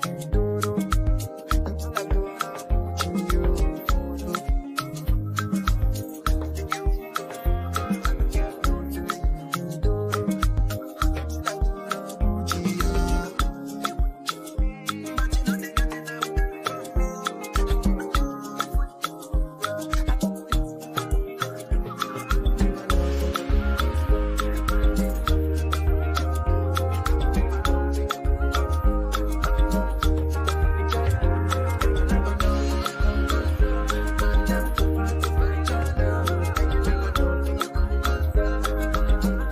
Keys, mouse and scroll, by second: 3.3 right click, 4.0 click, 6.1 Up, 12.8 ctrl+click, 13.8 ctrl+g, 15.7 ctrl+t, 16.9-30.0 drag, 34.4-38.7 drag, 38.7 ctrl+c, 39.4 click.